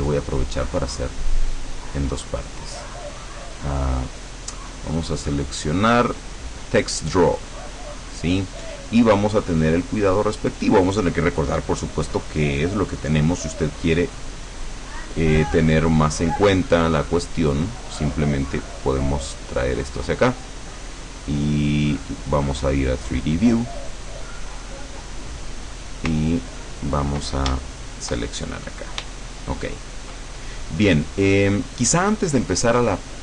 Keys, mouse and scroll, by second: 3.2 click, 4.1 click, 7.7 click, 16.7-20.4 drag, 21.8 click, 23.1 click, 24.5 middle click, 25.5 click, 26.2-27.4 ctrl+drag, 27.6-30.4 ctrl+shift+middle drag.